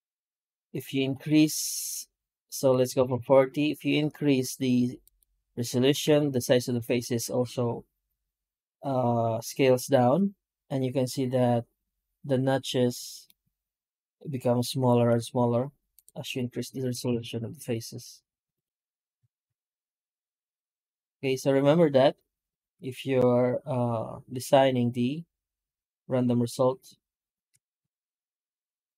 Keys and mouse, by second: 13.1-13.9 middle drag, 14.2 middle click, 14.5 middle click, 14.9 F9.